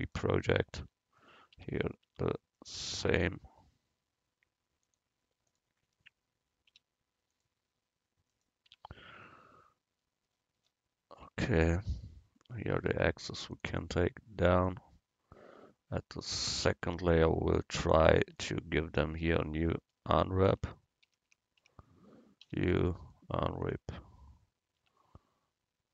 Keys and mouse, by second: 0.8 Tab, 1.8 Tab, 2.2 Tab, 3.2 Tab, 4.9-7.9 drag, 6.8 u, 8.8 Tab, 13.6-16.1 drag, 17.0-18.7 drag, 19.5 right click, 20.6 Tab, 21.1 a, 21.3 a, 21.7 a, 22.5 u, 25.0 Tab.